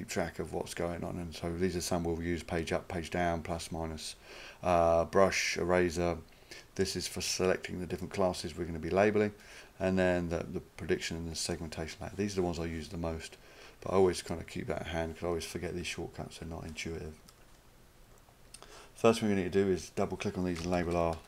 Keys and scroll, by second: 20.6-21.2 typing.